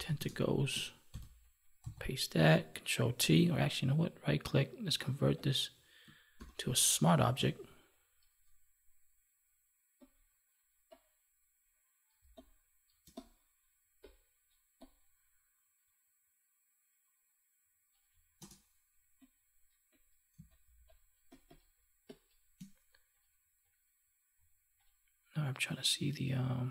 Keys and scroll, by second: 1.0 ctrl+v, 6.3 ctrl+t, 12.2 space, 20.3 space.